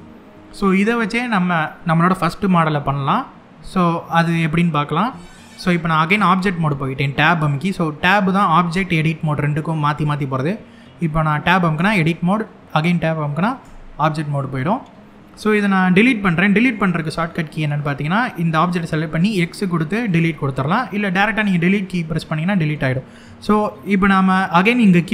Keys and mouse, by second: 4.6 Tab, 11.4 Tab, 13.3 Tab, 16.0-16.3 middle drag, 18.9 x, 23.1-23.5 middle drag.